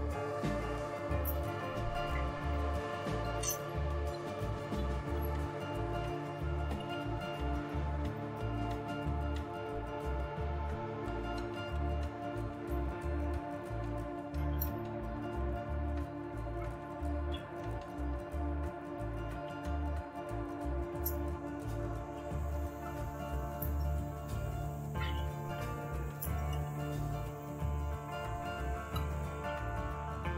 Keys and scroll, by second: 0.0-8.5 typing, 13.9-18.1 typing, 21.0-30.3 typing.